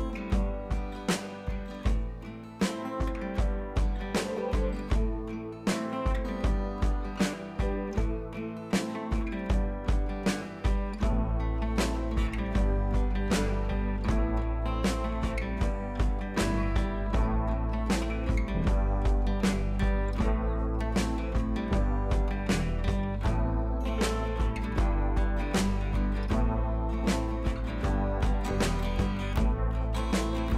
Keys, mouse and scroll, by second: 3.7 ctrl+v, 4.3 click, 11.7 click, 14.4 right click, 15.3-19.2 drag.